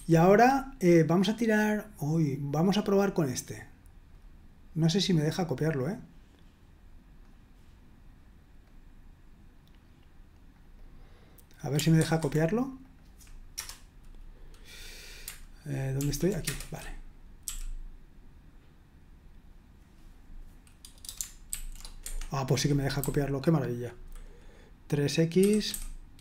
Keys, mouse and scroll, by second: 3.0-4.1 drag, 8.6-10.6 drag, 11.6 click, 12.1 super+1, 12.8 click, 13.5 Return, 15.9 super+l, 16.4 Return, 17.4 i, 21.5 ctrl+v, 22.0 Escape, 23.0-24.0 typing, 25.1-26.2 typing.